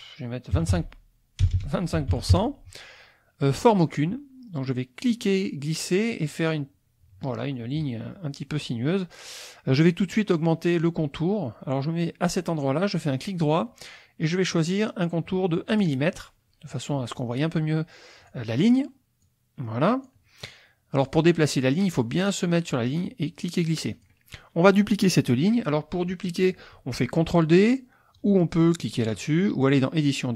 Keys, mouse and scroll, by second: 0.7 KP_5, 1.5 BackSpace, 2.0 KP_2, 2.2 KP_5, 2.3 KP_Enter, 5.0-8.0 drag, 13.0 click, 13.1 right click, 15.7 click, 18.2 click, 19.2-20.2 drag, 21.0 click, 23.0-24.2 drag, 29.7 click.